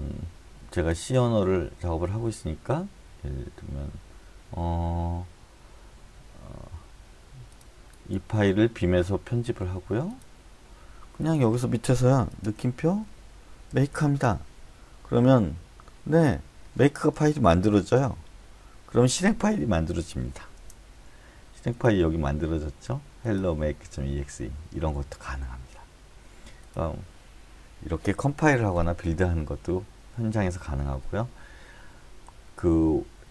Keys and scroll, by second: 12.4-14.5 typing, 18.0 Return, 20.6 Return.